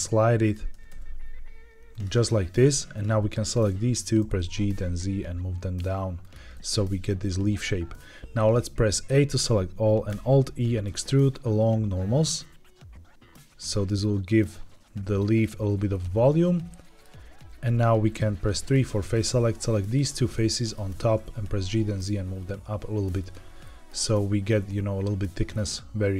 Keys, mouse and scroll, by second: 0.3 click, 0.6 g, 0.8 g, 1.8 click, 2.8 click, 3.4 shift+click, 4.1 g, 4.3 z, 6.1 click, 6.4-7.9 middle drag, 9.0 a, 10.0 alt+e, 15.1 click, 15.8-16.9 middle drag, 17.8 3, 19.0 click, 19.7 shift+click, 20.3 middle click, 20.9 g, 21.0 z, 23.1 click, 23.5 middle click, 25.4 middle click.